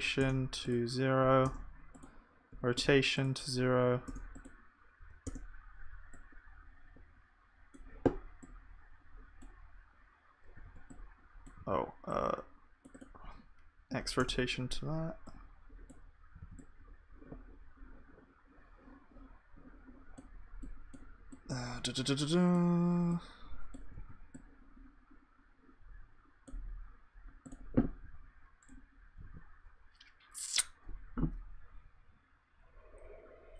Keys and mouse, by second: 8.6 click, 8.6 middle click, 8.6 right click, 10.7 ctrl+z, 16.4 ctrl+z, 17.3 click, 24.0 ctrl+z, 24.0-25.5 drag, 29.3 s.